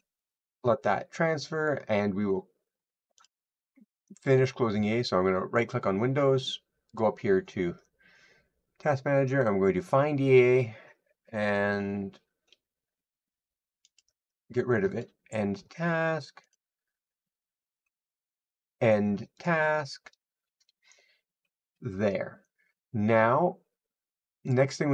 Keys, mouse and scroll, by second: 3.1 click, 6.8 click, 24.3 click.